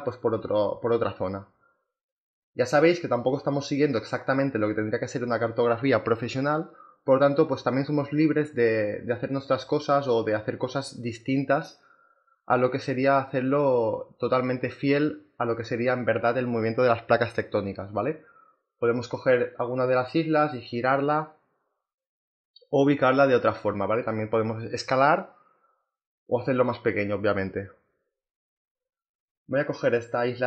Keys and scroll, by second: 2.6 v.